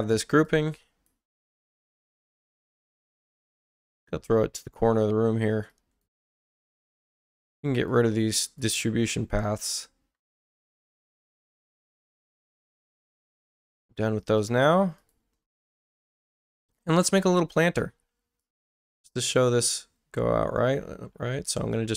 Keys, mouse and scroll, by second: 0.4 click, 2.9-4.8 ctrl+drag, 5.7 click, 7.7 click, 8.4 ctrl+click, 10.6 click, 11.3 ctrl+click, 12.5 ctrl+click, 14.4 click, 15.0 click, 15.6 x, 18.4 click, 21.7-21.9 drag.